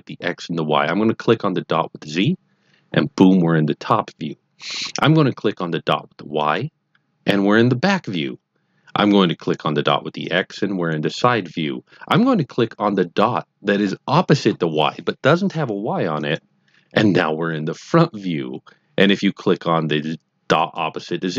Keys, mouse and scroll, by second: 1.9 click, 6.3 click, 10.2 click, 16.2 click, 20.5 click.